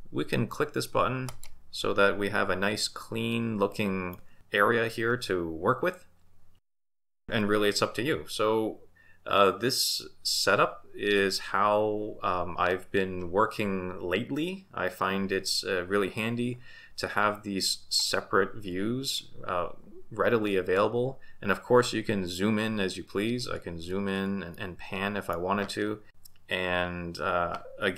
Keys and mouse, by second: 1.3 click, 3.3 middle click, 24.5-25.3 middle drag, 26.1 shift+b.